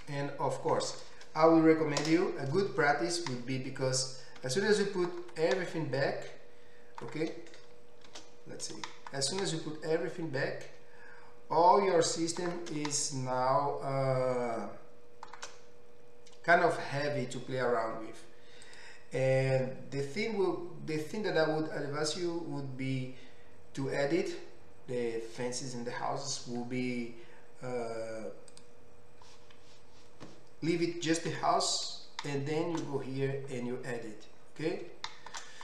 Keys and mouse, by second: 0.0-1.3 drag, 1.3-6.4 middle drag, 2.3 KP_0, 6.4 ctrl+alt+click, 7.0 ctrl+alt+middle click, 7.2 ctrl+alt+click, 7.3-11.2 middle drag, 8.3 shift+h, 11.2-12.6 ctrl+alt+drag, 12.6-18.7 ctrl+alt+middle drag, 18.7 click, 18.8-28.6 middle drag, 28.6-35.6 drag, 31.4 Tab.